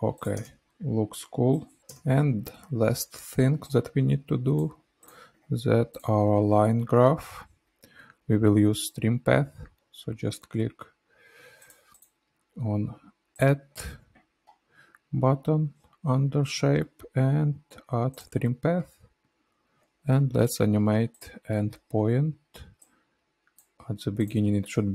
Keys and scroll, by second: 0.4 space.